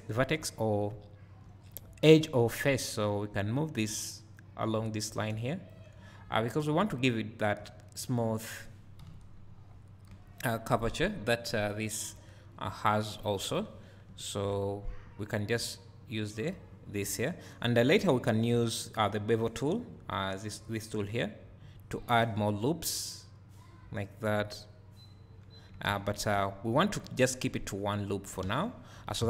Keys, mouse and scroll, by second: 0.8 `, 1.2-3.4 drag, 4.4-9.0 drag, 6.0 `, 8.1-9.0 scroll down 2, 9.1-10.2 drag, 13.3-13.6 scroll up 1, 13.6-14.5 scroll down 1, 14.5 `, 16.0 click, 24.2 `, 26.4 `, 28.4 1.